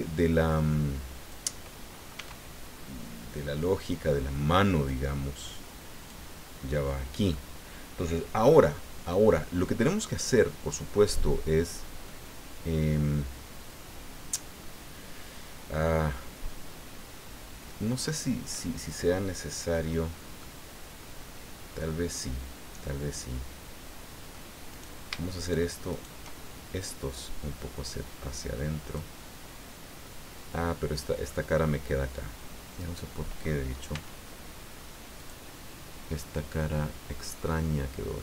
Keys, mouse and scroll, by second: 0.5-1.5 drag, 2.1 s, 3.7 click, 4.8-6.2 drag, 7.3-8.6 middle drag, 12.0-18.7 middle drag, 20.4-24.5 middle drag, 24.7 right click, 25.4 shift+right click, 25.9 shift+right click, 26.8-29.1 drag, 29.2-31.4 middle drag, 31.5-31.9 scroll up 2, 32.8 right click, 33.9 x, 35.2 click, 36.5-38.2 middle drag.